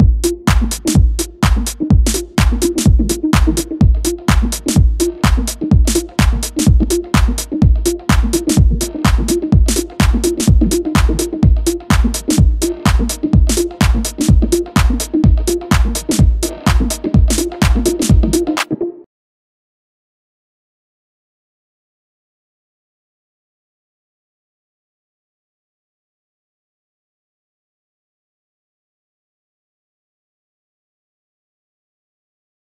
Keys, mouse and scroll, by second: 7.2-8.5 drag, 8.5 scroll up 2, 9.4 click, 11.2-14.3 drag, 15.0 click, 16.5-19.5 drag, 19.9-21.2 drag, 21.8 click, 24.8 ctrl+right click, 26.5 ctrl+right click, 27.4 ctrl+right click, 28.2 ctrl+right click, 29.0 ctrl+right click, 29.7 ctrl+right click, 30.5 ctrl+right click, 31.2 ctrl+right click, 32.0 ctrl+right click.